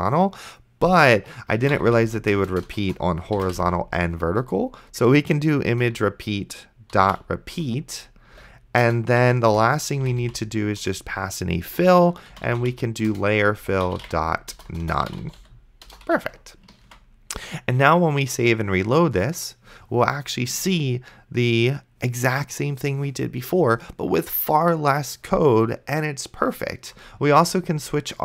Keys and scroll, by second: 1.8 n, 2.5 BackSpace, 3.6 m, 5.7 Return, 6.7-10.7 typing, 9.5 Return, 10.8 Return, 12.5-16.1 typing, 13.1 Return, 17.1 ctrl+s.